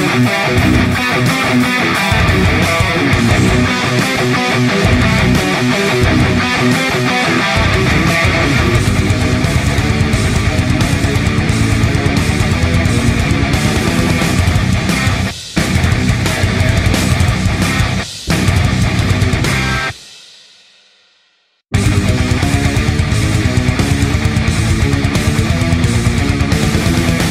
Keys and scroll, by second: 3.9 typing, 14.7-15.4 typing, 16.5 typing, 26.2-27.1 typing.